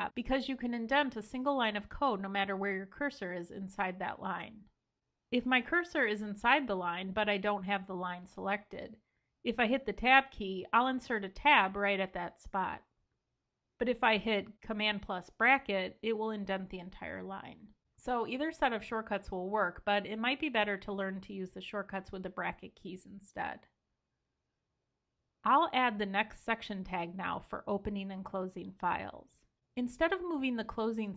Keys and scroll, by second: 12.1 super+z, 14.6 super+].